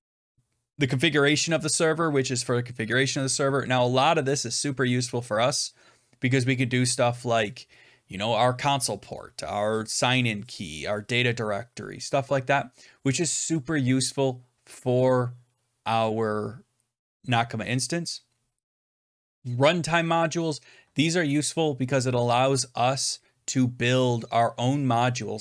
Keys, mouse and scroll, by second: 0.2 click, 1.2-1.9 scroll down 15, 4.3-4.9 scroll up 9, 5.1 scroll down 4, 9.7 scroll, 18.6-23.6 drag.